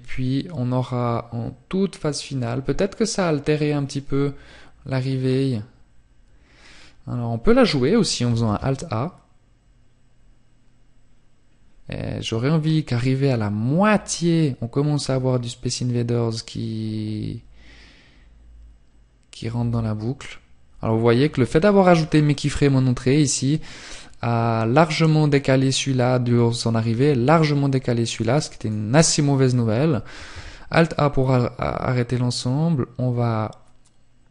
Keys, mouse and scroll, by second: 26.3 click, 28.9 alt+a.